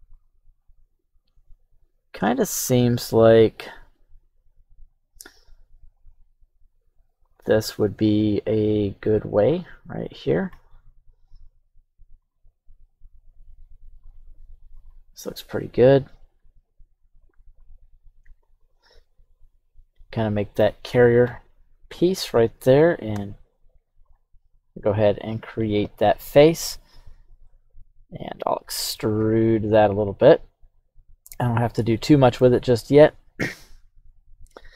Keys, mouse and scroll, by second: 24.0-25.6 drag, 27.4-28.9 middle drag, 29.2 e, 31.3 click, 32.0 middle click.